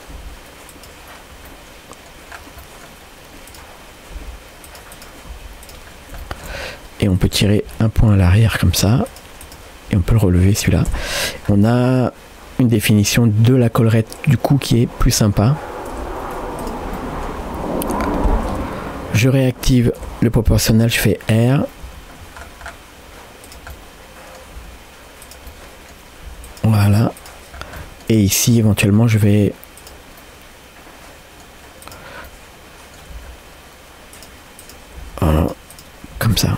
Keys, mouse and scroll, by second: 0.1 g, 1.5 middle click, 2.3 scroll down 1, 2.6 middle click, 3.5 click, 4.2 g, 5.0 click, 5.4 g, 5.9 scroll down 1, 6.2 shift+middle click, 6.6 scroll up 1, 7.2 click, 7.7 g, 9.4 click, 10.0 g, 10.9 Tab, 11.2-11.8 scroll down 3, 11.7-15.4 middle drag, 15.7 scroll up 2, 16.0 Tab, 16.6 click, 17.0 middle click, 18.5 o, 20.0 o, 23.7 middle click, 24.6 g, 25.5 middle click, 26.3 g, 27.2 click, 27.6 scroll up 2, 27.8 middle click, 28.2 shift+middle click, 28.7 scroll up 1, 28.8 middle click, 29.3 scroll up 1, 29.8 click, 30.2-31.4 middle drag, 31.9 click, 32.3 middle click, 33.2 g, 34.6 click, 35.1 g, 35.7 click, 36.2 g.